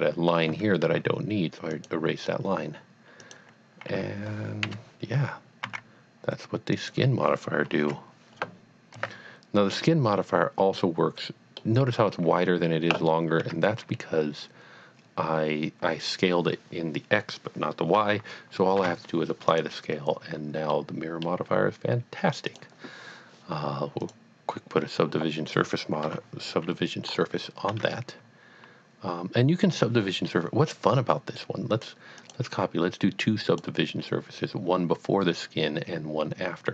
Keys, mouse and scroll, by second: 0.5 x, 1.7 click, 3.2 click, 4.7 KP_1, 5.6 e, 6.8 click, 7.8 KP_3, 8.9 e, 9.8 click, 10.1 middle click, 11.3 middle click, 13.4 Tab, 18.8 ctrl+a, 19.5 click, 20.8 middle click, 21.2 middle click, 22.5 click, 24.0 click, 26.0 KP_1, 27.1 scroll up 1, 27.7 Tab, 32.2 click, 33.5 click, 35.3 scroll down 1.